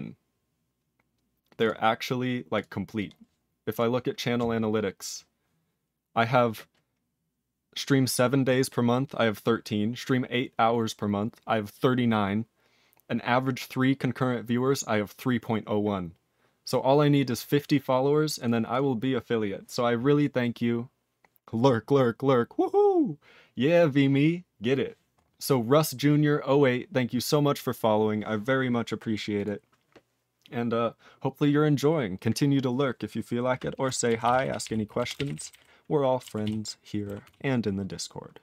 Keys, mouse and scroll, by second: 29.4 click, 29.4 click, 34.2 ctrl+s, 34.3 ctrl+p, 34.5 ctrl+p, 34.6 ctrl+p, 35.0 ctrl+a, 35.2 ctrl+e, 35.2 ctrl+n, 35.3 ctrl+e, 35.5 ctrl+g, 36.4 ctrl+s, 37.2 ctrl+s.